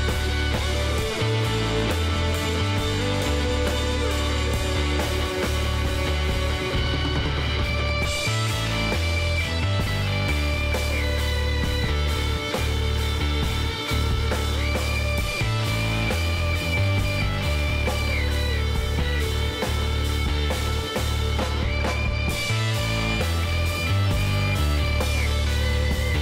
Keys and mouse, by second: 0.6 s, 5.5-7.5 middle drag, 9.1 KP_7, 10.0-12.7 middle drag, 10.6 z, 12.8-14.6 drag, 13.3 z, 14.2 z, 14.6 z, 15.9-18.9 drag, 18.0 b, 20.7 x, 22.7-26.2 middle drag.